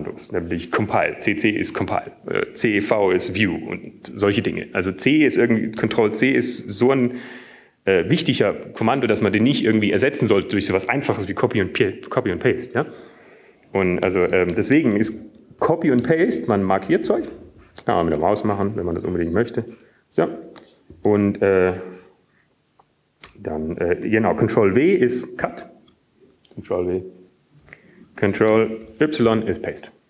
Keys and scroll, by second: 18.0 Up, 18.8 Up, 18.8 Down, 18.8 Right, 19.3-20.2 typing, 21.3 typing, 28.6 ctrl+w.